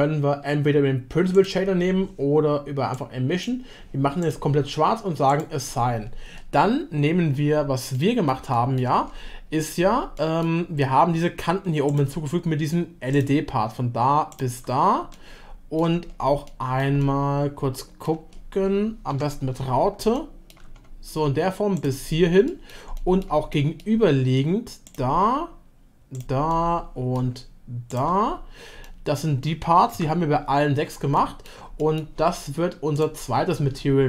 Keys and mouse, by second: 7.9-8.3 middle drag, 8.5 shift+middle drag, 10.2 middle click, 11.9 click, 14.3 shift+click, 15.1 shift+middle click, 16.4 middle click, 17.0-18.1 shift+middle drag, 20.1-20.5 shift+middle drag, 21.7 shift+click, 22.4 shift+middle click, 22.9 middle click, 23.5 shift+middle click, 26.4 shift+middle click, 28.8-29.9 middle drag, 31.2 shift+middle click, 31.8 middle click, 32.9-34.0 drag.